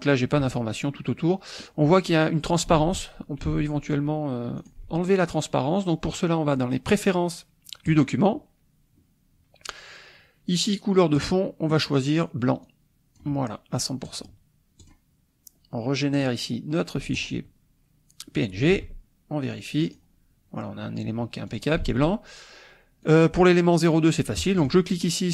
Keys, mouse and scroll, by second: 2.8 alt+Tab, 3.5 alt+Tab, 4.6 alt+click, 7.9 click, 11.2 click, 12.6-13.4 drag, 14.1 click, 14.8 click, 16.1 click, 17.1 click, 18.8 alt+Tab, 19.8 click, 21.5 click, 21.9 alt+Tab, 23.0 click, 23.5 click, 24.6 click, 25.0-25.3 drag.